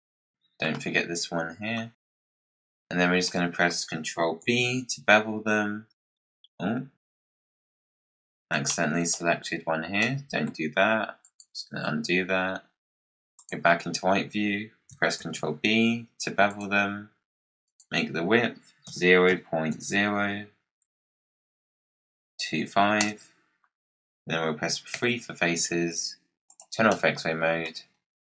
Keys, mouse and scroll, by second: 0.0 shift+click, 1.7-2.4 scroll down 13, 2.7-4.3 drag, 4.3 ctrl+b, 7.2 scroll up 1, 7.4 middle click, 8.1 scroll up 1, 8.2-11.1 middle drag, 11.1 shift+click, 13.3 click, 15.1 ctrl+b, 17.6-20.7 drag, 24.8 3, 26.4 click, 26.8-27.9 middle drag, 27.9-28.4 scroll up 3.